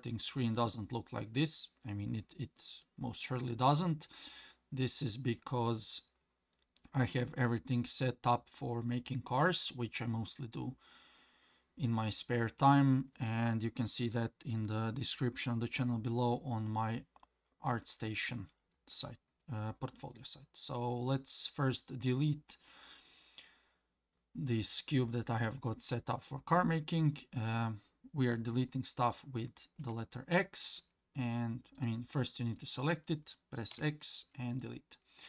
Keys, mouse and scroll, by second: 2.8-3.9 middle drag, 4.8-5.6 middle drag, 11.9-12.6 middle drag, 29.8 x, 31.7 click, 32.5 click, 33.7 x.